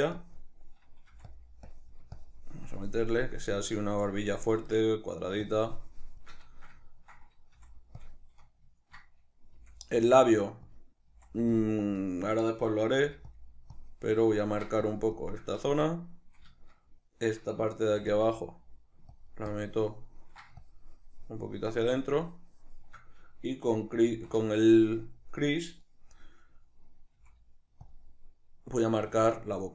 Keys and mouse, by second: 0.1-1.3 drag, 1.1 f, 1.7-4.8 drag, 4.8 middle click, 5.5-6.6 shift+drag, 6.6-8.1 ctrl+shift+middle drag, 7.6 f, 8.1 click, 8.2-10.8 shift+middle drag, 9.6 f, 10.8 click, 11.1 f, 11.6 click, 13.0 f, 13.8-15.7 ctrl+drag, 15.7 shift+middle click, 16.6-18.2 shift+middle drag, 17.9 f, 18.2 click, 19.2-27.9 ctrl+drag, 24.1 shift+c, 27.1 f, 29.0 f.